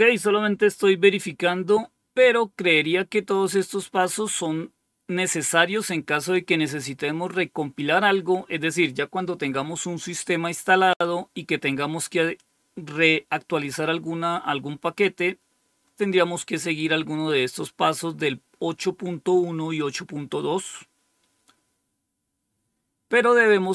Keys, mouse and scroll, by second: 2.5-3.6 scroll down 5, 4.1 scroll down 2, 4.8-6.6 scroll down 3, 6.6-10.9 scroll down 1, 10.9-11.9 scroll down 1, 11.9-14.5 scroll down 1, 14.5-16.5 scroll down 3, 16.5 scroll down 1, 17.0-17.7 scroll down 2, 19.4-19.7 scroll down 4, 20.9-22.9 scroll down 4, 22.9-23.6 scroll down 1, 23.6 click.